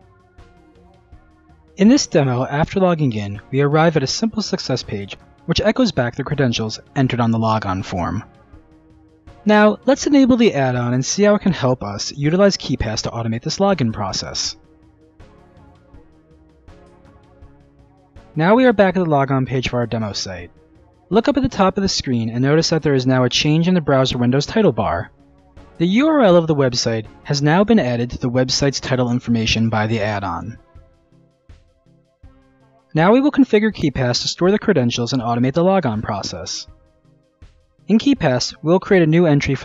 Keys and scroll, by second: 3.3 Return.